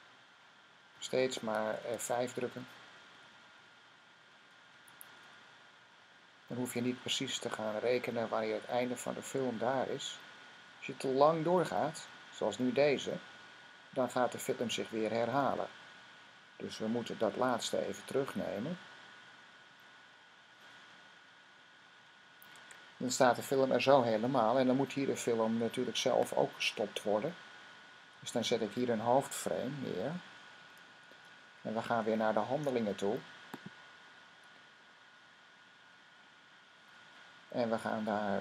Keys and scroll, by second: 0.2 typing, 3.0 F5, 4.1 F5, 4.8 F5, 5.5 F5, 6.3 F5, 7.0 F5, 8.0 F5, 13.8 F5, 14.4 F5, 17.4 F5, 19.2 F5, 20.0 F5, 20.1 F5, 20.7 F5, 21.7 F5, 30.9 F6.